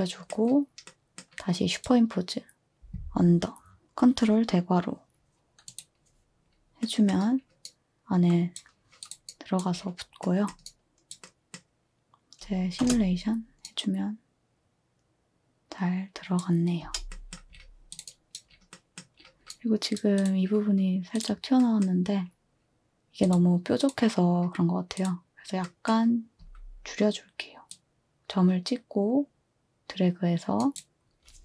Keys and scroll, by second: 12.8 space, 16.8 space, 26.4 z.